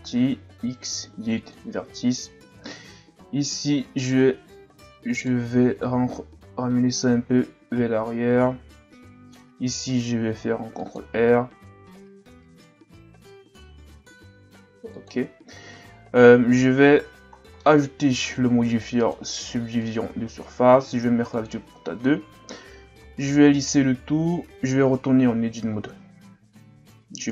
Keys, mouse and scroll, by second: 0.4 x, 2.6-4.0 shift+scroll up 6, 4.0 alt+right click, 5.1 alt+right click, 6.1 click, 10.3 ctrl+r, 17.1 z, 17.4 scroll down 2, 17.6 middle click, 18.0 Tab, 20.0 click, 23.1 w, 24.9 Tab, 25.9 KP_1.